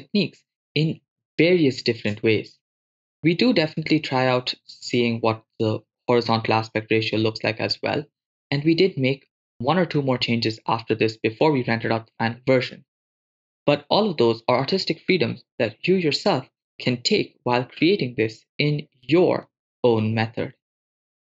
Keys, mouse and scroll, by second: 9.9 shift+space, 13.4 shift+space, 17.6 click, 18.7 click, 19.5-21.2 drag.